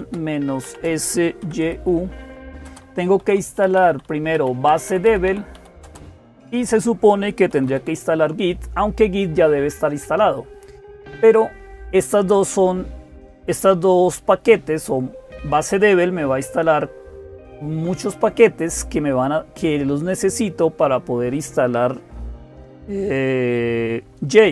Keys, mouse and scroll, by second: 0.0-24.5 typing.